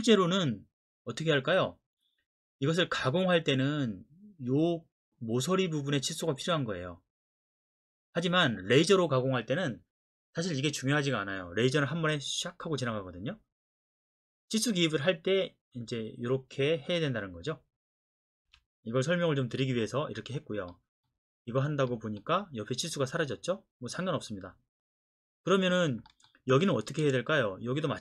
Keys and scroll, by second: 18.4 Escape.